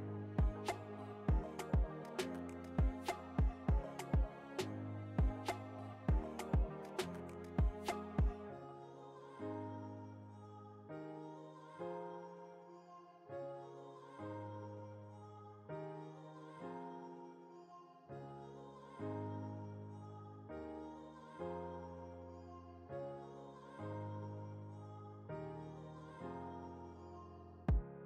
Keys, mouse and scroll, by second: 0.7 Return, 3.2 Return, 3.4 alt+scroll up 1, 5.1-10.1 drag, 11.1 alt+scroll up 1, 12.6 space, 12.7 click, 13.4 click, 13.8 space, 14.3 click, 14.6 space, 15.0 alt+scroll down 1, 17.5 alt+scroll down 1, 17.6 shift+click, 18.7 ctrl+g, 19.5 click, 20.8-23.5 typing, 23.7 Return, 25.3 click, 26.9 alt+scroll down 1, 27.5-28.0 alt+scroll up 1.